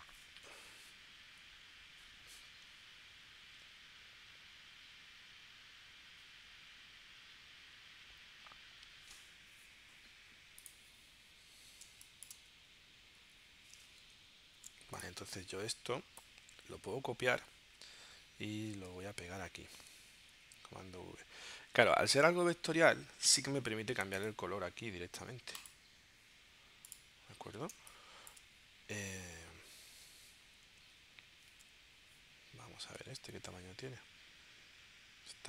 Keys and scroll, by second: 11.8 space, 14.0 super+y, 17.1 super+c, 20.3 super+v, 27.8 space, 31.5 super+Tab.